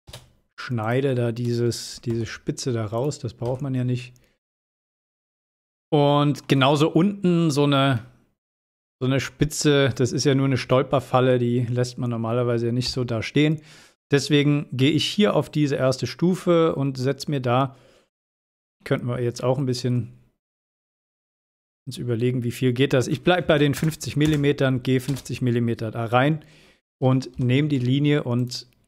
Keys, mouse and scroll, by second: 0.2 space, 0.9 click, 4.2 scroll down 1, 5.4 scroll up 1, 5.5-6.4 shift+middle drag, 8.9-10.4 shift+scroll up 2, 12.1 scroll up 1, 13.0 click, 15.8-16.4 middle drag, 22.6 space, 24.9 l, 25.9 click, 27.8 space, 28.2 click.